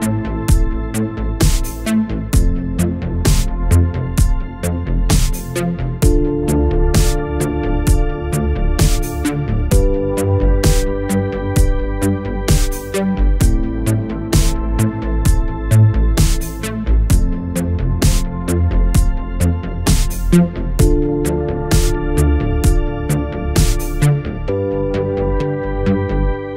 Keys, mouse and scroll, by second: 4.2 click, 5.7-6.4 alt+click, 9.2-10.0 alt+click, 19.7 right click, 22.8-23.6 typing, 24.2 click.